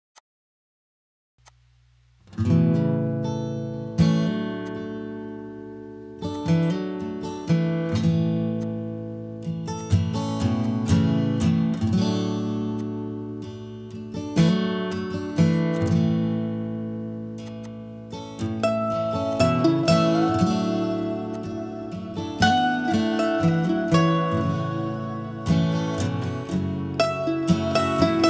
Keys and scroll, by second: 11.4 Escape.